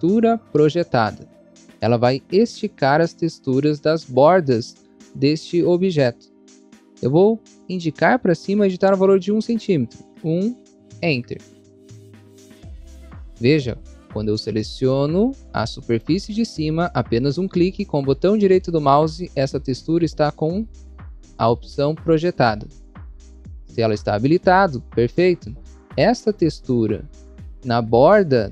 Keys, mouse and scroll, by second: 10.0 1, 10.9 Return, 12.0 scroll up 1, 12.8 scroll up 1, 14.7 click, 15.7 click, 17.6 right click, 26.5 click, 26.6 scroll up 1, 27.5 scroll up 1.